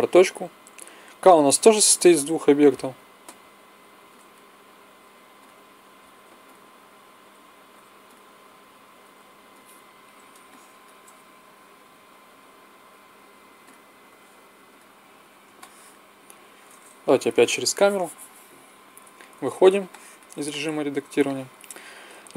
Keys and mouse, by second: 0.8 l, 1.5 l, 2.0 p, 3.1 l, 3.6 p, 4.6-7.5 typing, 8.8 l, 9.0 p, 12.1 l, 13.1 p, 13.9 l, 14.2 p, 17.1 KP_0, 19.2 Tab.